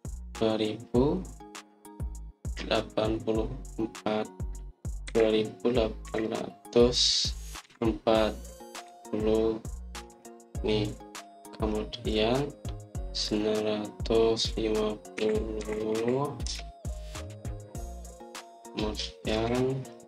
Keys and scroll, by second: 5.9 2, 7.0 8, 8.5 4, 9.8 0, 11.0 Return, 16.2-17.4 typing.